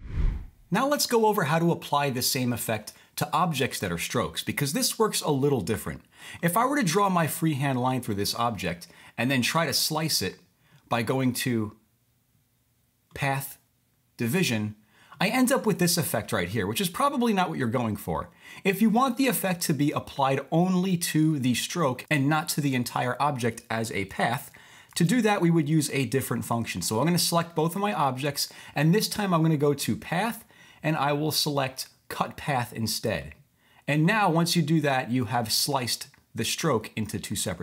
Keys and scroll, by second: 24.3 super+z, 24.9 super+z.